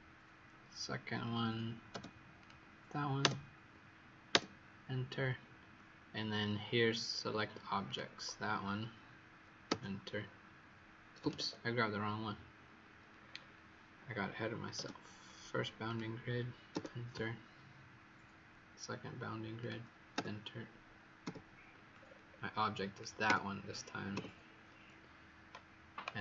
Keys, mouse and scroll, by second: 2.3 click, 7.8 click, 9.6 Return, 11.3 Escape, 13.0-13.6 scroll up 5, 15.8 click, 16.6 Return, 19.5 click, 20.1 Return, 21.9-22.9 scroll down 5, 22.9 click, 23.2 Return, 24.1 Return.